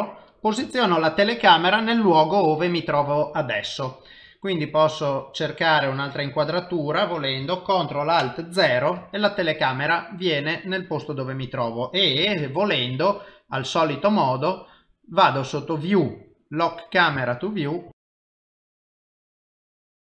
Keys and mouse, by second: 4.9 middle click, 8.5 ctrl+alt+KP_0, 12.6 n, 15.5 click, 16.7 click, 17.6 ctrl+middle click.